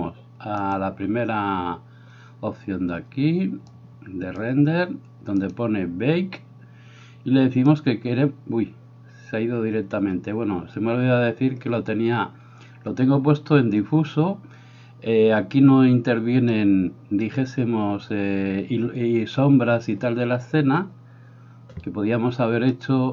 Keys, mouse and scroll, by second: 0.7 click, 3.7 click, 5.5-14.4 drag, 22.7-23.1 drag.